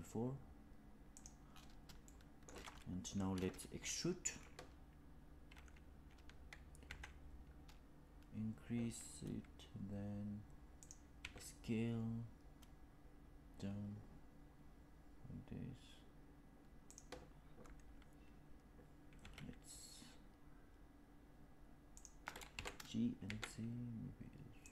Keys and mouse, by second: 1.9 shift+middle click, 6.7 e, 11.1 s, 19.1 s, 23.3 g.